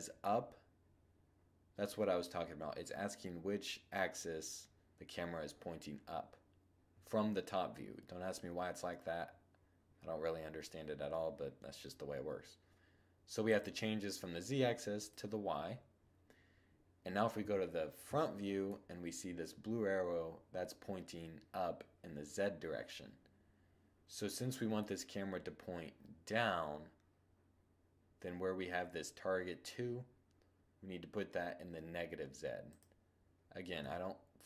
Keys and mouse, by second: 14.4 click, 16.6 1, 17.3-17.8 middle drag, 23.5-25.4 middle drag, 32.5-33.6 drag, 32.9 1.